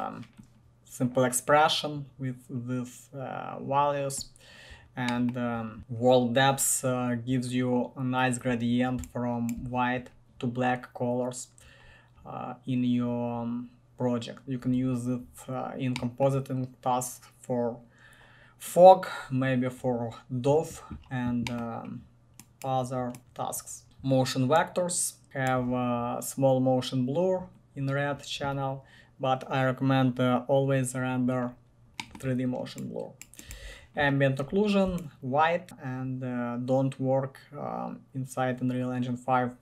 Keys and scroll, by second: 23.2 1, 23.8 b, 25.2 typing, 33.7 ctrl+1.